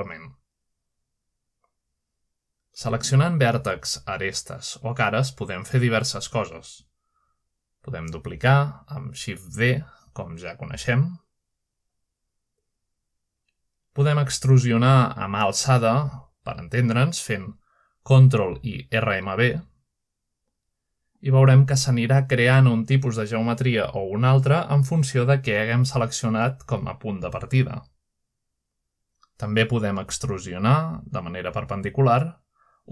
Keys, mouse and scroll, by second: 0.5-1.5 drag, 2.2 middle click, 2.6 typing, 3.3 click, 4.1 middle click, 5.3 shift+middle click, 6.4 shift+click, 7.0 middle click, 8.5 middle click, 8.7 typing, 9.3 click, 9.3 middle click, 9.7-10.0 scroll down 1, 10.1 shift+middle click, 10.9 shift+middle click, 11.5 typing, 12.0 click, 14.2 middle click, 14.6-15.3 scroll up 1, 16.5 middle click, 16.8 click, 17.9 middle click, 19.0 shift+middle click, 20.1 middle click, 20.6 typing, 21.2 click, 22.1 click, 22.9 ctrl+right click, 23.8 ctrl+right click, 24.5 ctrl+right click, 25.2 shift+middle click, 25.6 shift+middle click, 26.0 ctrl+middle click, 26.2-27.6 ctrl+right drag, 28.1 shift+middle click, 28.6 middle click, 29.0 typing, 29.7 shift+click, 31.0 ctrl+middle click, 31.3-32.9 ctrl+drag.